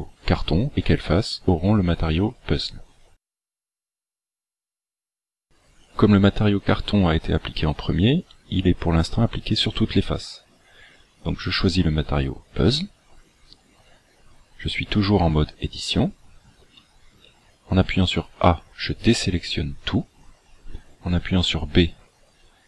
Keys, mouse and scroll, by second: 5.9 click, 11.2 click, 16.6 a, 17.3 a, 18.2 a, 21.3 b.